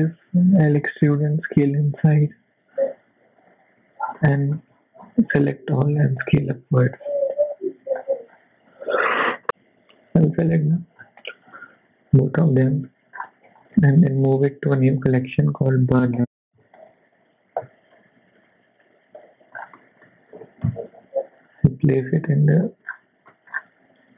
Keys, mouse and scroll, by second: 0.8 e, 3.7 Tab, 4.1 middle click, 4.6 Tab, 5.0 a, 5.4 middle click, 6.0 e, 7.7 Tab, 8.0-9.0 scroll down 4, 9.5-10.0 scroll down 1, 10.0 click, 10.0-10.7 scroll down 1, 10.7-11.1 scroll down 5, 11.5 b, 12.4 middle click, 13.1-13.7 scroll up 3, 13.7 m, 19.2 KP_7, 19.5 scroll down 3, 19.8 shift+middle click, 20.3 g, 22.6 shift+middle click, 22.9-24.1 scroll up 6, 23.3 shift+middle click, 24.1 KP_1.